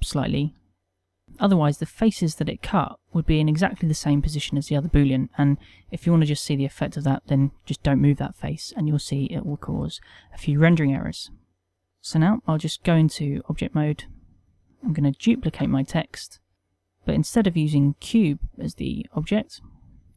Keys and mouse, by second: 0.2 g, 1.2 click, 10.0 ctrl+middle click, 10.7 shift+middle click, 11.3 middle click, 11.7 ctrl+middle click, 12.9 Tab, 13.6 middle click, 14.2 click, 15.5 shift+d, 19.9 click.